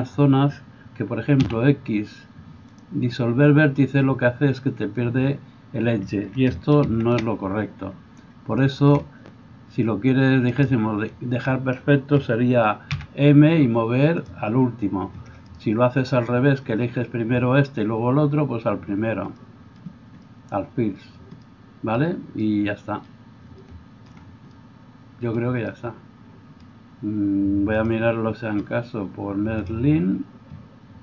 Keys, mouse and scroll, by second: 1.4 x, 6.5 ctrl+right click, 6.9 ctrl+z, 7.3 ctrl+right click, 7.5-8.5 drag, 8.5 shift+middle click, 8.7 shift+right click, 8.9 click, 9.4 shift+right click, 10.5 shift+click, 10.5 shift+right click, 11.4-28.0 drag, 13.0 m, 28.0-29.6 middle drag, 29.6-31.0 drag.